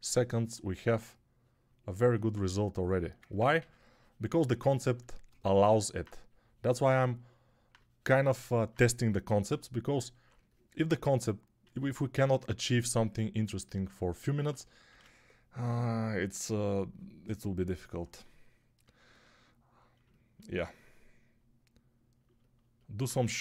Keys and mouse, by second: 3.5 3, 7.6-14.4 drag, 7.6-14.4 middle drag, 7.6-14.4 right drag, 11.6 1, 14.8 shift+r, 16.4 ctrl+r, 23.1-23.4 typing.